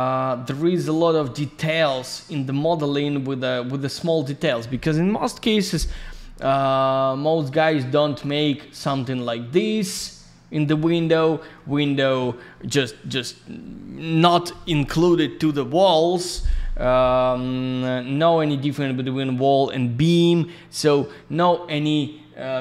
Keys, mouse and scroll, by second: 0.3 scroll down 1, 0.8 scroll up 1, 1.7-2.8 scroll down 1, 7.2 middle click, 7.9-8.3 scroll up 1, 9.4-9.9 scroll down 1, 11.3 middle click, 11.5 middle click, 18.0 middle click, 21.0-22.0 scroll up 1.